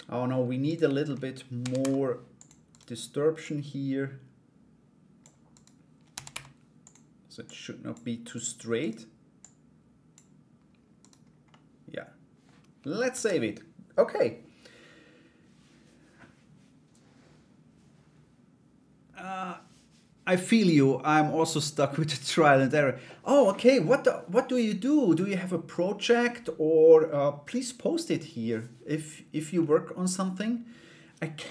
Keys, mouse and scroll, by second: 0.2 right click, 2.3 right click, 3.0-4.8 drag, 5.1 right click, 7.0 click, 7.9 right click, 8.4 right click, 8.9 click, 10.6 right click, 11.1 middle click, 12.7 ctrl+s, 24.8 middle click, 29.2 middle click.